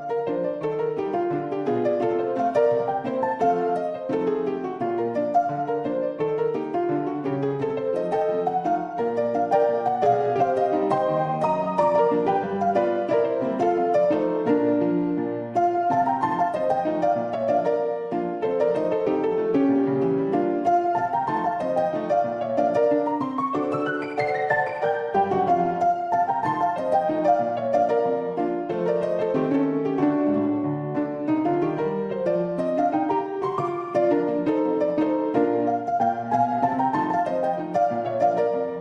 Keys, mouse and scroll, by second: 0.1 shift+click, 0.8 shift+drag, 1.3 Tab, 1.9 shift+middle click, 2.2 click, 6.8 shift+click, 7.1 click, 8.6 shift+click, 10.8 shift+click, 12.2 k, 20.3 k, 28.0 click, 28.7 z, 29.4 z, 30.2 shift+middle click, 30.5 click, 31.6 ctrl+r, 35.5 s.